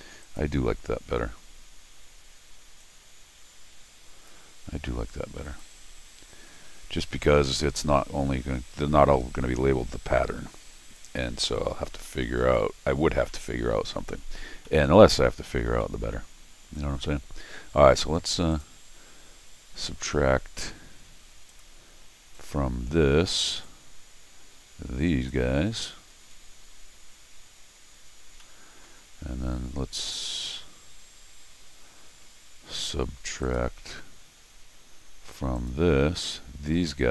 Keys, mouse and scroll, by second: 0.2 click, 2.8-4.3 drag, 5.4 click, 7.5 scroll down 1, 7.7 middle click, 12.0 middle click, 12.5 middle click, 13.3 middle click, 14.6 middle click, 15.8 middle click, 18.5 click, 21.5 click, 22.3 click, 23.6-25.3 drag, 28.2 scroll up 1, 28.4 middle click, 30.2-31.6 scroll down 1, 31.6-32.1 scroll down 1, 33.4 click, 35.6 click, 36.3 click.